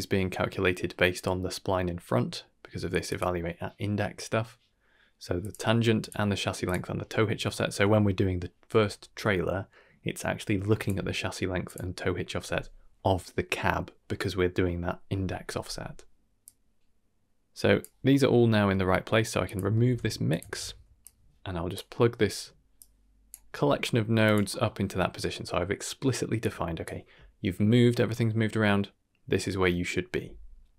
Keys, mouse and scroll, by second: 3.0 click, 5.4 click, 6.0 click, 6.6 click, 7.5 shift+middle click, 10.7 click, 11.6 click, 15.9 middle click, 16.4-17.8 drag, 18.7 middle click, 19.4 click, 19.7 ctrl+x, 20.2 click, 20.4 ctrl+x, 21.0-21.7 drag, 21.9 middle click, 22.7-23.3 drag, 23.4 g, 24.5 middle click, 26.4-26.9 drag.